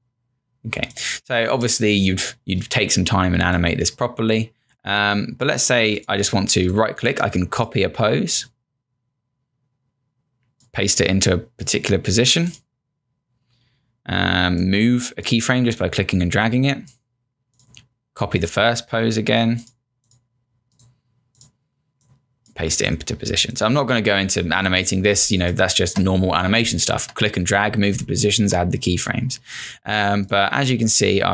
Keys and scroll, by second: 25.2 space, 26.3 0, 26.6 space, 28.0 space.